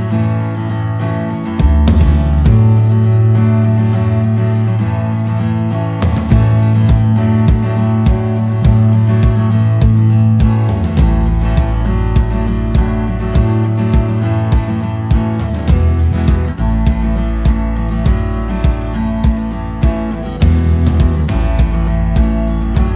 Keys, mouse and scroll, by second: 0.4 shift+click, 0.8 shift+click, 1.6 shift+click, 1.7 shift+click, 1.8 shift+click, 2.2 click, 4.8 c, 5.5 click, 6.4 click, 6.7 c, 8.1 click, 8.3 click, 8.8 c, 14.7 middle click, 15.5 c, 20.8 middle click, 21.8 c.